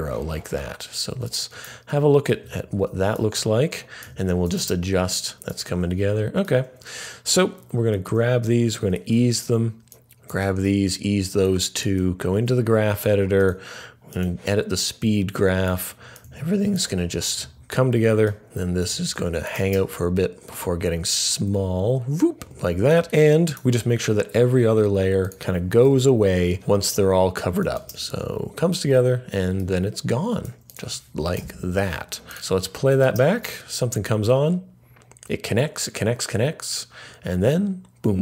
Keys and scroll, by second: 7.9 F9, 8.9 F3, 9.7-10.4 typing, 12.0 typing, 13.4 typing, 18.5 typing, 22.8 typing, 25.2 typing, 25.8 alt+], 31.4 alt+].